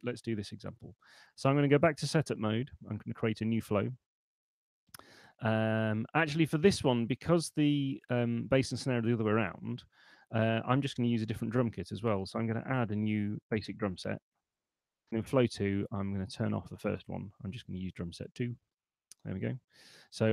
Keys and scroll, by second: 1.2 super+1, 11.4 shift+p, 12.6 m, 13.2 Return, 17.9 super+2.